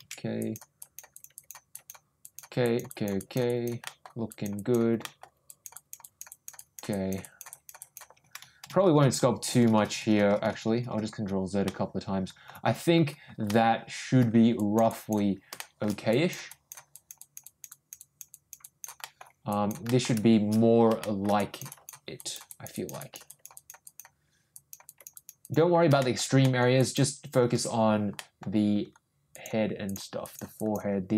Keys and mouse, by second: 0.4 ctrl+click, 0.8 ctrl+click, 1.1 ctrl+click, 1.3 ctrl+click, 1.7 ctrl+click, 2.2 ctrl+click, 2.6 ctrl+click, 2.9 ctrl+click, 3.1 ctrl+click, 3.4 ctrl+click, 3.8 ctrl+middle click, 4.2 click, 4.5 click, 5.0 middle click, 5.4 click, 5.7 click, 6.0 click, 6.3 click, 6.5 click, 6.9 click, 7.2 click, 7.5 click, 7.7 click, 11.6 ctrl+middle click, 13.5 ctrl+middle click, 14.5 ctrl+click, 14.9 ctrl+click, 15.5 shift+middle click, 16.1 click, 16.4 click, 16.9 click, 17.2 click, 17.4 click, 17.7 click, 18.0 click, 18.3 click, 18.6 click, 19.0 middle click, 19.4 click, 19.8 middle click, 21.0 shift+middle click, 21.3 click, 21.7 click, 22.1 click, 22.5 click, 22.7 click, 23.0 click, 23.2 click, 23.5 click, 23.8 click, 24.5 click, 24.8 click, 25.1 click, 25.4 click, 26.0 shift+middle click, 26.4 middle click, 26.8 click, 28.1 ctrl+middle click, 29.3 ctrl+click, 29.8 ctrl+click, 30.2 ctrl+click, 30.6 ctrl+click.